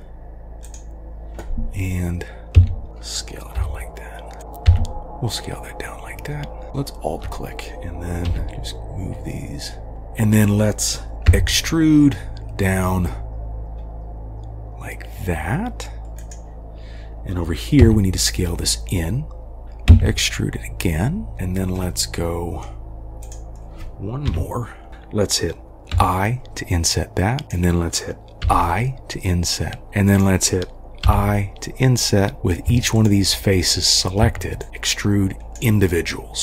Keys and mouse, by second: 2.6 s, 3.6 g, 4.7 e, 6.7 alt+2, 8.3 g, 11.3 e, 17.8 s, 19.9 e, 21.9-22.7 middle drag, 24.3 KP_3, 25.9 i, 28.5 i, 30.1 click, 31.1 i, 33.6-34.1 middle drag, 34.7-35.6 drag.